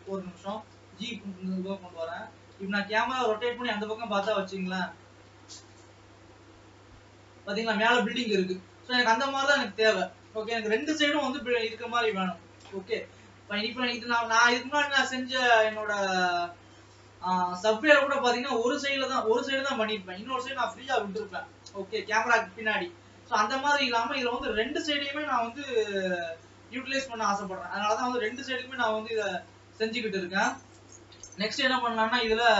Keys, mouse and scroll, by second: 0.2 ctrl+s, 0.6 g, 2.4 r, 5.2 r, 9.3 ctrl+z, 10.2 ctrl+s, 10.8 KP_0, 12.9 ctrl+s, 13.1-13.7 scroll up 2, 13.7-15.6 scroll down 4, 15.6 scroll down 3, 16.0 middle click, 16.9-17.7 scroll down 9, 18.3 scroll down 4, 19.0 scroll down 1, 19.0-20.2 middle drag, 20.2-21.2 scroll down 3, 21.2 KP_0, 22.9-24.0 scroll up 6, 24.0 scroll down 2, 24.9 ctrl+s, 25.4 g, 29.7-30.5 scroll up 5, 30.5 alt+a, 31.1 ctrl+s.